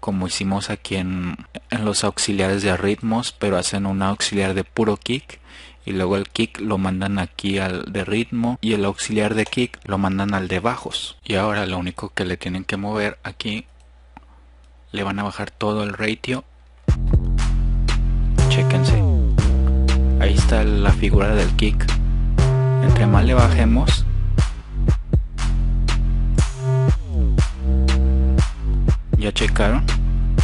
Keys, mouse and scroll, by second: 16.5-16.9 drag, 21.1 click, 21.4 drag, 21.9-22.4 drag, 26.7 click, 28.2-30.1 drag.